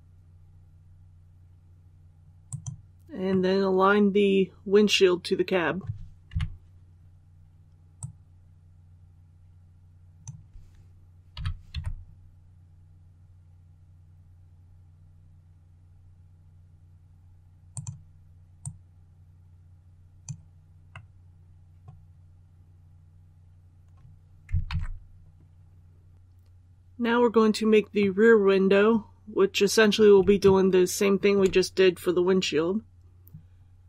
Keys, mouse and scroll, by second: 2.3 click, 3.2-6.2 middle drag, 6.2 KP_3, 7.9-10.3 drag, 11.2-11.6 typing, 17.6-20.3 drag, 20.8-22.3 middle drag, 24.6 alt+a, 26.1 click, 27.9-30.1 middle drag, 30.3 shift+middle click.